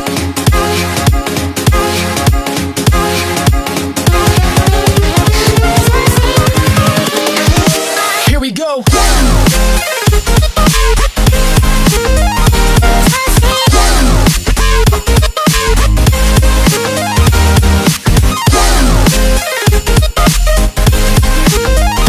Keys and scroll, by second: 6.9 KP_1, 7.1 KP_4, 14.5 ctrl+d, 15.3 ctrl+d, 15.7 ctrl+d, 16.1 ctrl+d, 16.4 ctrl+d, 16.7-17.7 ctrl+d, 17.9 ctrl+d, 18.1-20.2 typing.